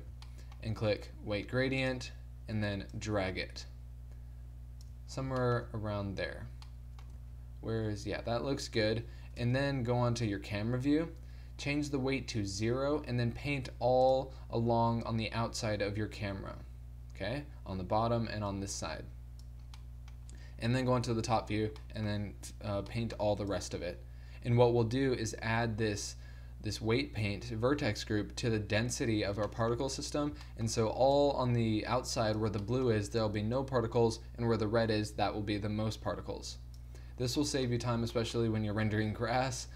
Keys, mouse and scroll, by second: 2.0-3.7 drag, 7.3 z, 9.4 KP_0, 10.4 click, 11.1-12.6 drag, 13.0 click, 13.5 f, 19.7 middle click, 20.9 KP_7, 21.6 middle click, 23.6-26.6 drag, 29.2-31.2 middle drag, 31.2 click, 32.7 click, 33.3-34.4 drag, 37.0-39.7 middle drag.